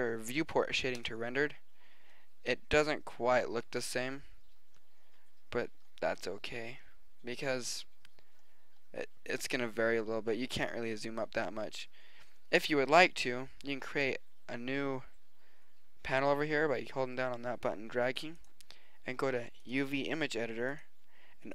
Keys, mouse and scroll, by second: 20.6 click.